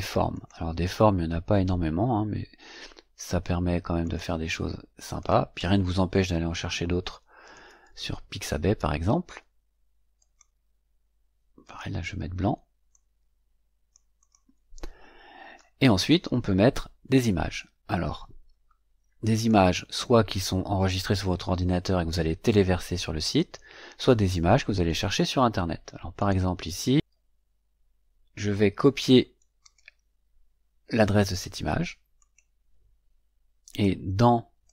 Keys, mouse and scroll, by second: 0.2 click, 3.9 click, 5.1 click, 10.1 click, 11.5 click, 12.8-14.0 drag, 14.1 click, 19.2 click, 26.1 click, 29.5 right click, 32.1 click, 33.6 click, 34.6 click.